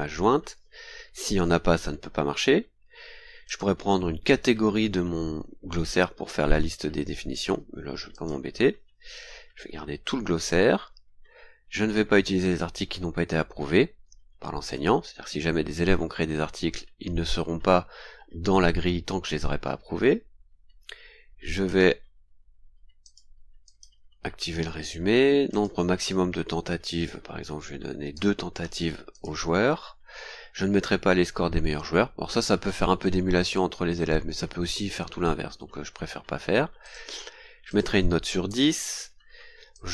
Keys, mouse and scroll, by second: 2.5 scroll down 2, 3.4 click, 4.6 scroll down 2, 8.1 click, 10.7-11.1 scroll down 2, 20.1-20.4 scroll down 2, 21.6 click, 23.0 click, 23.6 click, 24.6 scroll down 2, 25.5 click, 28.1 KP_2, 29.1 click, 29.7-30.2 scroll down 2, 36.8 click, 37.6 click, 38.4 BackSpace, 39.7 click.